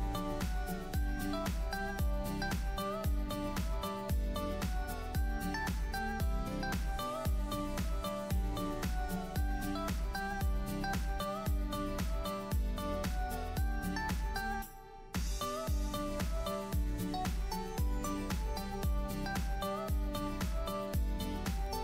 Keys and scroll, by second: 7.8 BackSpace, 13.4 Down, 14.6 Up, 19.3 super+s.